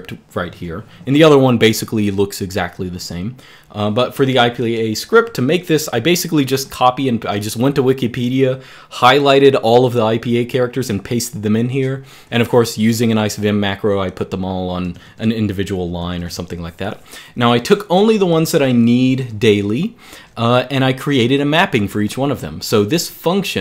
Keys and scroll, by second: 14.8-20.5 typing, 21.9-23.6 typing.